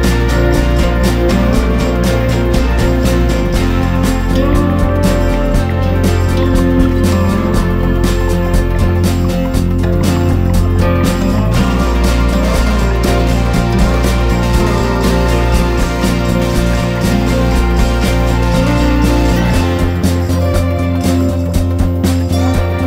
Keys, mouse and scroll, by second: 1.5 Down, 2.0 Up, 2.1 typing, 3.1-10.3 drag, 10.9 ctrl+g, 12.3-14.4 drag, 14.5 Down, 15.0 Down, 15.1 typing, 19.1 click.